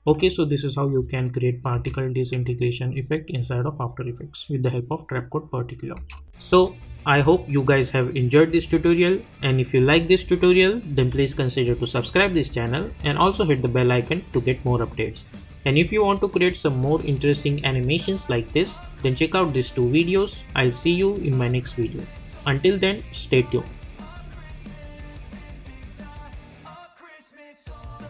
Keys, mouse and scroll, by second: 0.4-1.0 scroll down 1, 1.0-1.7 scroll up 1, 1.7 space, 5.9 space.